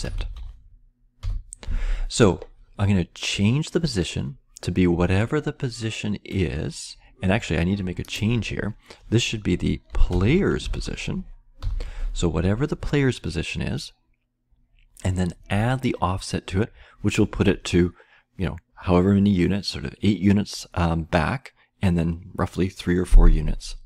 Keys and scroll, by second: 0.0-0.8 typing, 6.2 typing, 9.6-11.5 typing.